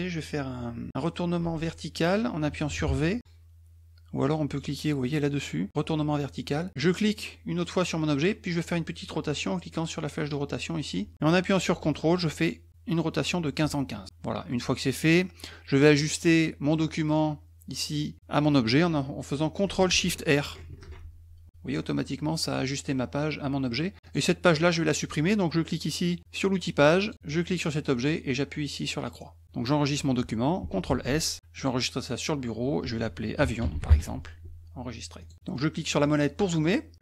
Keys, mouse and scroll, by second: 1.4 v, 7.6 click, 10.3-13.6 drag, 20.6 ctrl+shift+r, 21.7 middle click, 24.0 click, 27.0 click, 27.5 click, 29.0 click, 30.9 ctrl+s, 31.6 click, 33.2-34.4 typing, 35.2 click, 35.7 middle click, 36.0 middle click, 36.4 middle click.